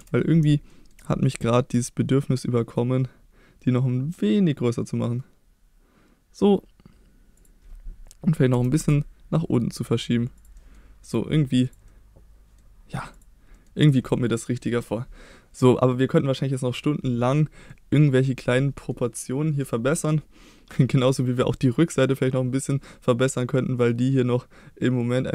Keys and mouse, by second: 0.0 KP_1, 0.7 shift+middle click, 1.7 s, 7.4 click, 8.5 g, 8.8 z, 10.4 click, 10.6 middle drag, 11.0 click, 11.7 click, 11.9-12.6 middle drag, 13.1 click, 13.5 middle click, 13.8-14.7 drag, 14.7 middle drag, 17.7-18.0 middle drag, 18.6 middle drag, 19.2-19.6 middle drag, 19.9-20.7 middle drag, 21.5-23.6 middle drag, 23.8-25.3 middle drag.